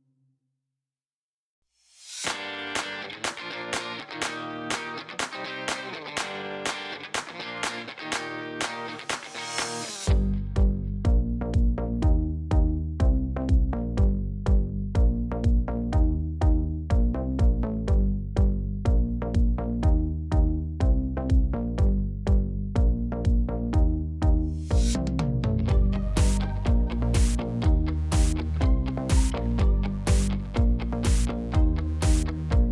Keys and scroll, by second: 7.5-8.0 typing, 8.1 Return, 10.3 Tab, 12.8 ctrl+c, 13.8 x, 14.2 ctrl+v, 20.9-21.9 typing, 22.3 Return, 28.1 5, 28.2 Return, 29.2 Tab.